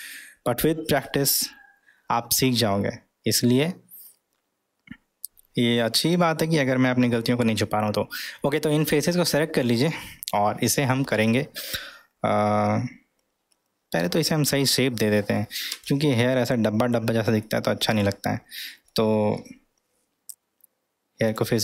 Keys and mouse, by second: 4.1-9.4 middle drag, 15.7 Tab, 16.3-17.4 middle drag, 17.9 click, 18.9-19.5 middle drag, 21.2 drag.